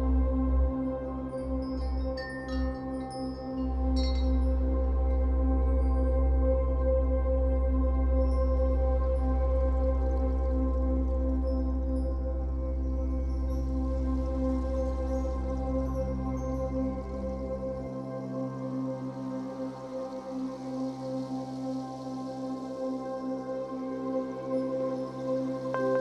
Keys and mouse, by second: 4.0 space, 4.2 click, 4.6 ctrl+z, 6.0 z, 10.0 typing, 10.1 ctrl+z, 11.6 ctrl+z, 11.6 typing, 14.0 ctrl+z, 14.0 typing, 15.9 ctrl+z, 15.9 typing, 17.6 click, 19.5 ctrl+z, 24.3 click, 25.2 ctrl+z.